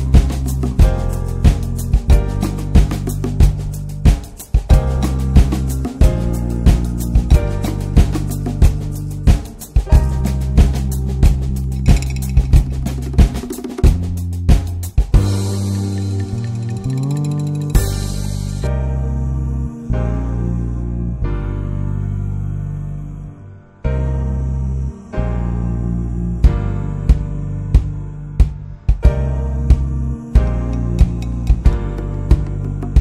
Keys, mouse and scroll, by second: 1.7 click, 2.4-3.1 middle drag, 3.1 scroll up 2, 3.6-5.8 drag, 13.4-15.2 drag, 24.7 drag, 25.7 middle click, 26.0 click, 26.2-26.5 middle drag, 26.5 ctrl+s, 26.9 shift+middle click, 27.3 ctrl+s, 27.5 click, 27.7 scroll down 1, 27.8-28.5 middle drag, 28.5 ctrl+s, 28.7-29.2 scroll up 1, 29.2 click, 30.2 click, 30.9 scroll down 1, 31.1-33.0 middle drag.